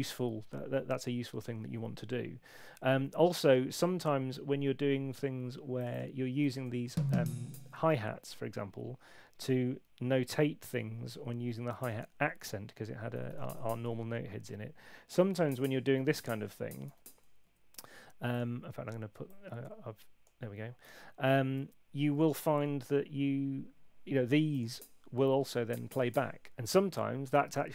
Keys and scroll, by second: 6.8 Up, 12.8-13.7 typing, 15.3 y, 25.5 Right.